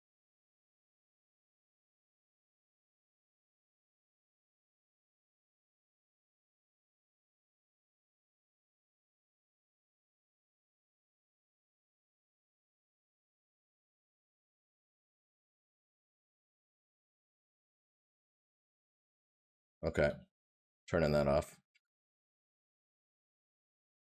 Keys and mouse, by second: 20.8 right click.